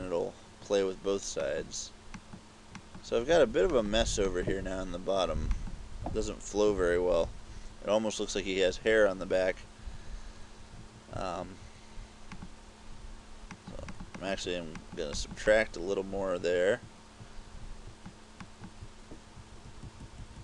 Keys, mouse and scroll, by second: 1.5 click, 2.3 click, 2.8 click, 3.8 click, 4.4 click, 5.6 click, 6.6 KP_6, 6.8 KP_6, 7.3 KP_6, 7.6 KP_6, 12.4 click, 13.6 click, 14.0 click, 14.2 click, 14.9 click, 15.2 click, 15.6 click, 18.4 click, 19.4-20.4 typing.